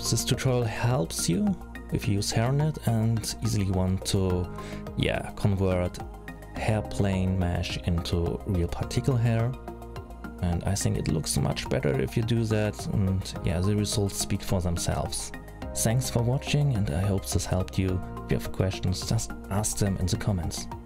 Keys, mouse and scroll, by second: 1.2 middle click, 2.4 middle click, 4.5 click, 7.4 middle click, 12.6-12.9 scroll up 3, 12.9-13.6 scroll down 5, 13.6 middle click, 15.9 middle click.